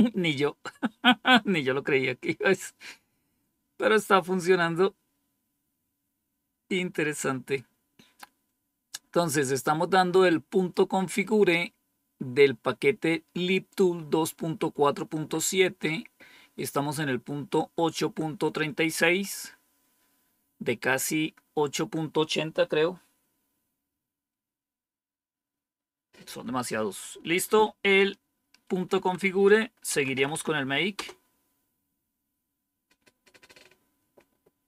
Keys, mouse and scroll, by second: 27.7 Up, 28.8 Down, 29.6-30.7 typing, 30.9 Return.